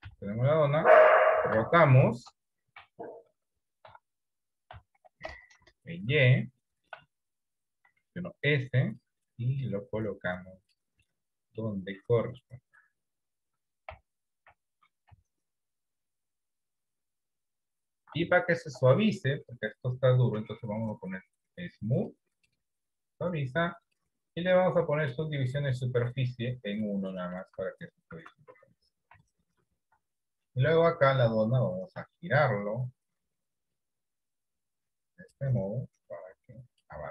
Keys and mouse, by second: 0.1 KP_3, 1.3 r, 3.9 r, 6.8 shift+middle click, 7.9 s, 9.7-10.8 drag, 11.3 middle click, 12.1-13.3 drag, 15.3 KP_3, 17.5 click, 18.6 shift+middle click, 20.9-22.1 drag, 24.0-25.2 drag, 27.0 middle click, 27.7 Tab, 28.2 Tab, 29.3 KP_7, 30.3 shift+middle click, 32.3 shift+middle click, 34.7-37.0 drag.